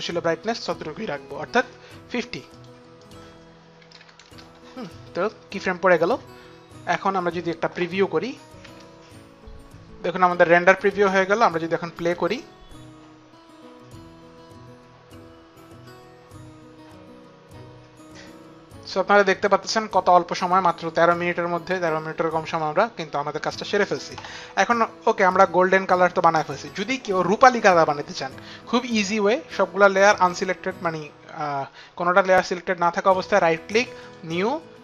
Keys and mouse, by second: 2.2 click, 3.5 click, 3.5 KP_5, 3.6 click, 3.6 KP_0, 3.6 KP_5, 3.8 Return, 6.6 click, 8.2 click, 8.2 space, 10.9 space, 12.8 click, 22.6 click, 25.3 click, 26.3 click, 33.2 right click, 34.0 click.